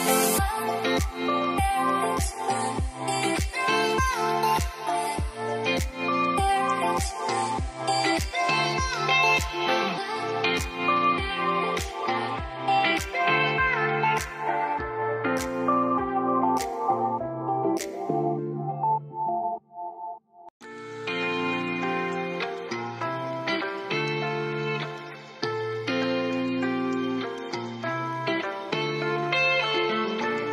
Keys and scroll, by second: 8.2 b, 10.1-11.0 typing, 19.1 0, 22.3 `.